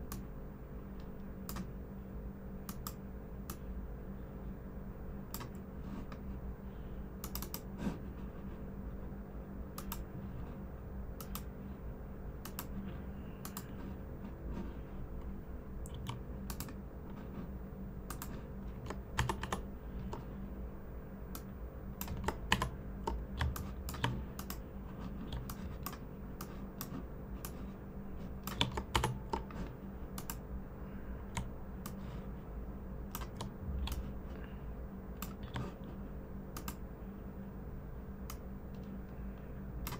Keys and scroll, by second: 15.9 v, 19.1 super+-, 19.3 super+-, 22.5 super+=, 23.3-23.9 typing, 28.9 super+-, 34.3 typing.